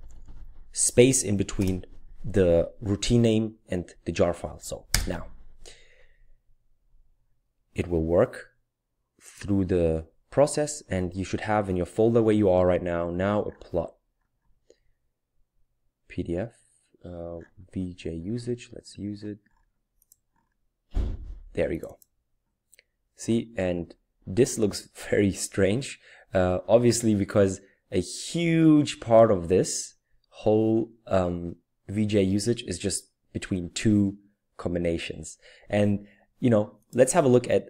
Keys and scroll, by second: 0.0-0.3 typing, 1.6 typing, 4.9 Return.